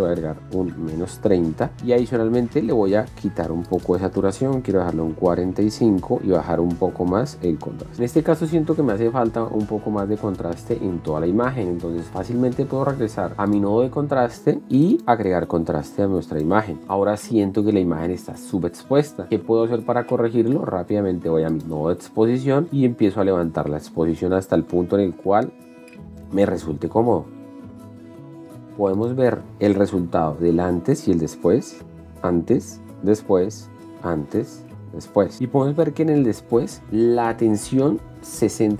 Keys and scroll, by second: 0.5-1.9 typing, 1.9 Return, 5.1 KP_4, 5.2 KP_5, 5.5 Return, 31.9 shift+d, 36.2 shift+d.